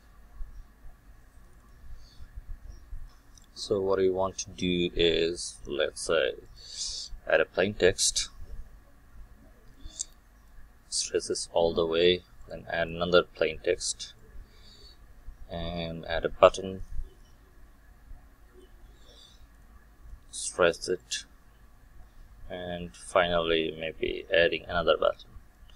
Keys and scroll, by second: 1.5 ctrl+shift+F12.